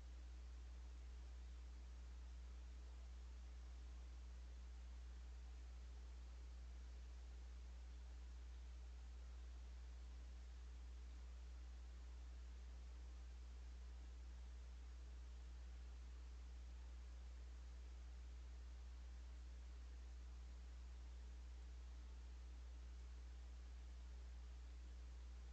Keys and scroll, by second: 0.6-1.3 typing, 3.3-5.9 typing, 7.4-9.8 typing, 11.0-11.8 typing, 14.4 s, 17.6 s, 19.6 d, 23.3-24.6 typing.